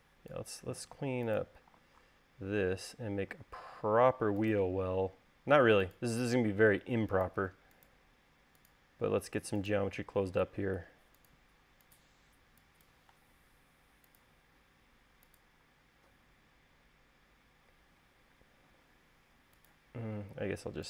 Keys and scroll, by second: 0.8-1.5 typing, 3.8 l, 11.5 l, 13.1 e.